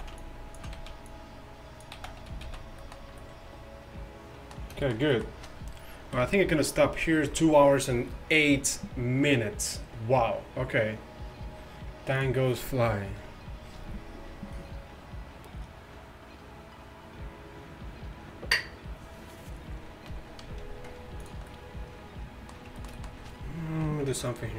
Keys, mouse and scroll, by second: 0.0 z, 0.8 z, 2.0 z, 2.3 a, 2.5 z, 6.2 KP_5, 23.9 KP_1, 24.2 KP_5.